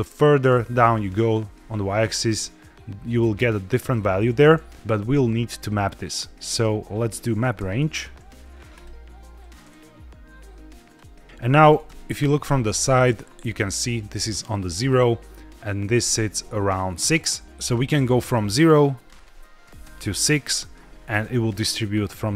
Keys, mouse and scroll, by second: 1.4 scroll down 1, 6.1-8.8 drag, 10.8 click, 11.8 KP_3, 18.8-20.0 drag.